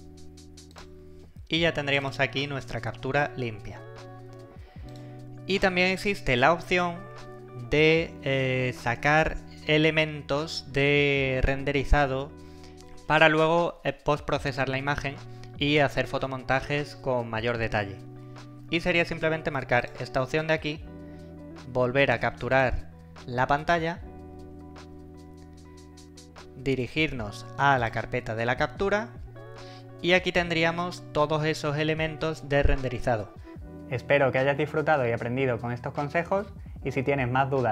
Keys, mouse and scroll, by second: 2.2 click, 4.9 click, 18.1 click, 19.8 click, 22.6 click, 27.8 click.